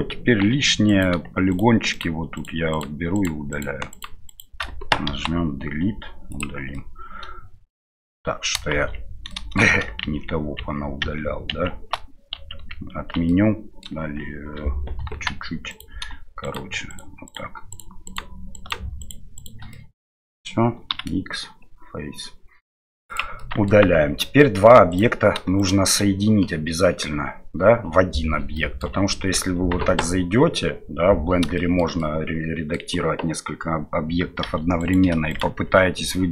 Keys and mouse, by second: 0.5 3, 0.8 right click, 1.9 right click, 2.3 right click, 2.7 right click, 3.1 right click, 3.5 shift+right click, 3.9 shift+right click, 4.2 shift+right click, 5.1 Delete, 6.7-7.7 middle drag, 8.7-11.9 shift+z, 9.3 middle click, 12.5 ctrl+z, 13.2 middle click, 15.0 KP_1, 15.7 right click, 16.4 right click, 16.9 right click, 17.2 right click, 17.7 right click, 18.0 shift+right click, 18.5 shift+right click, 19.0 shift+right click, 19.7 middle click, 23.4 middle click, 23.8 Tab, 24.2 middle drag, 24.9 right click, 25.6 shift+right click, 28.5 middle click, 29.8 Tab, 31.5 shift+middle click, 32.0 middle click, 34.4 2, 35.3 shift+right click.